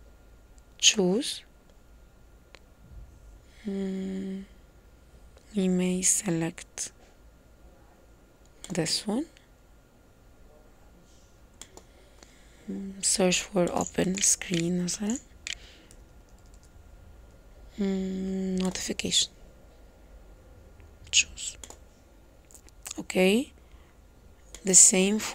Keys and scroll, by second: 14.2-16.5 typing, 17.6 typing.